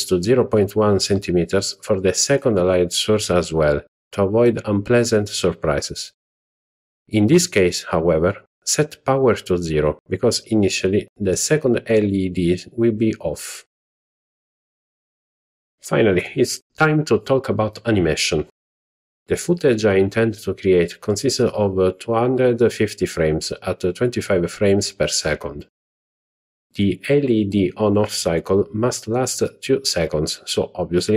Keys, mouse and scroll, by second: 1.3 click, 2.5-5.8 drag, 10.3-11.6 drag, 12.7 z, 16.1 click, 21.7-22.4 drag.